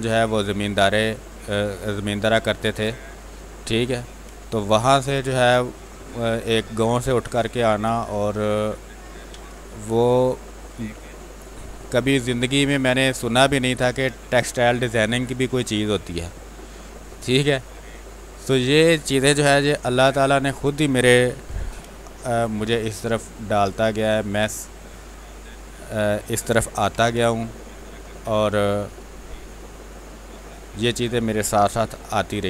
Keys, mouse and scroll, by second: 4.2 space, 4.4 alt+click, 7.1 ctrl+d, 7.3 w, 8.2 click, 8.5 space, 8.7 alt+click, 10.6 shift+space, 10.9 click, 11.1 space, 12.6 ctrl+click, 13.9 shift+space, 14.1 click, 14.4 space, 15.0 shift+click, 15.5 shift+space, 16.0 alt+click, 18.2 click, 19.4 r, 19.8 click, 21.4 b, 21.9 ctrl+space, 22.2 ctrl+click, 22.4 ctrl+space, 22.9 ctrl+click, 23.1 click, 23.1 space, 23.6 ctrl+click, 26.8 n, 27.1 space, 27.4 ctrl+click, 28.5-31.7 drag, 31.8 w, 32.3 alt+click.